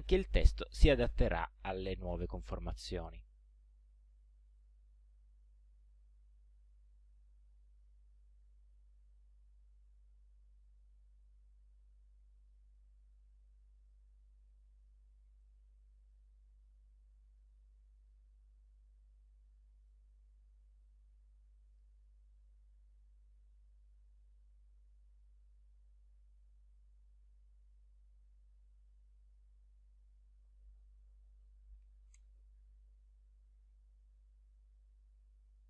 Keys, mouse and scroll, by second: 2.5-3.8 drag, 4.6 click, 6.0-8.6 drag, 9.6-10.8 drag, 13.8 click, 14.8 click, 15.4 click, 16.1 click, 17.3 click, 18.0 click, 19.9 click, 21.4 ctrl+a, 24.2-29.6 drag, 30.0 click, 31.6-32.5 typing, 35.0 click, 35.5 click.